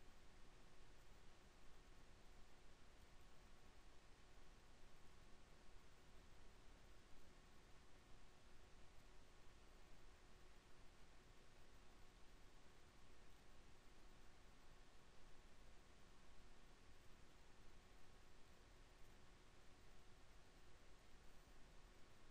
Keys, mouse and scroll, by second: 6.3 KP_7, 8.1 KP_7, 10.1 ctrl+KP_7.